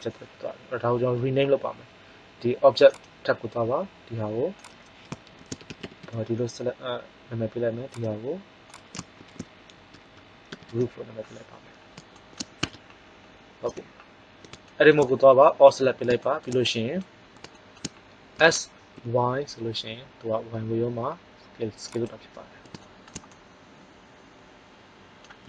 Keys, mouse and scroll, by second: 7.8-10.6 drag, 9.9 o, 12.1 middle click, 12.5 Tab, 13.6 a, 18.3 s, 22.5-23.9 middle drag.